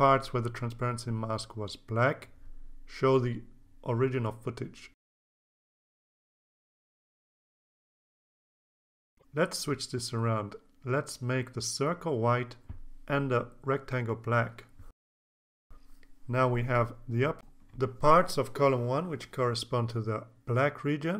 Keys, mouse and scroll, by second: 5.1 click, 6.2 click, 6.8-7.4 drag, 8.1 click, 10.0 click, 11.4 click, 12.8 click, 15.7 click, 16.8 click.